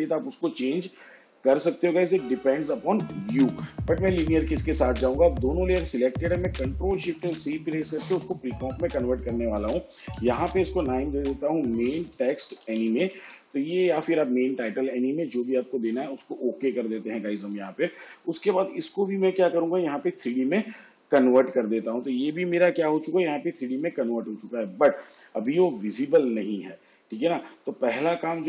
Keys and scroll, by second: 7.0 ctrl+shift+c, 9.8-13.7 typing.